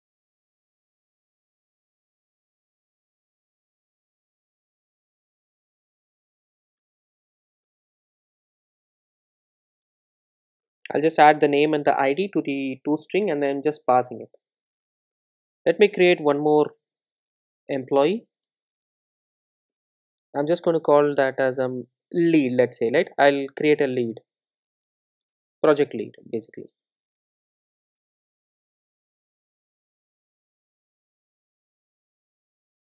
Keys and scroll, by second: 3.3 super+d, 9.9 Return, 11.5 super+s, 18.4 super+b, 22.2 alt+Return, 27.4 super+e.